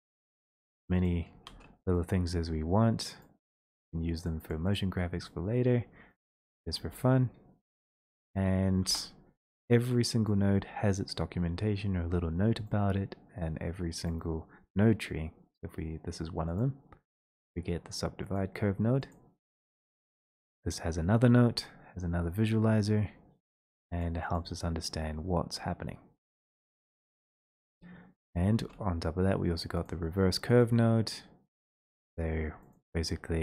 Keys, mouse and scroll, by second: 0.4 click, 1.0 click, 1.5 shift+click, 3.2 middle click, 4.3 click, 4.6 click, 4.8 click, 6.1 middle click, 7.5 right click, 8.0 click, 8.8 Return, 10.3 right click, 11.2 x, 12.2 right click, 12.2 space, 14.0 right click, 16.5 click, 19.1 click, 19.5 click, 20.4 middle click, 21.6 middle click, 21.7 middle click, 22.1 middle click, 22.1 middle click, 22.2 middle click, 23.3 middle click, 23.6 click, 23.8 scroll, 24.4 click, 24.5 click, 26.3 click, 26.5 click, 28.2 scroll, 29.8 click, 30.6 click, 31.7 click, 32.6 middle click, 32.8 click.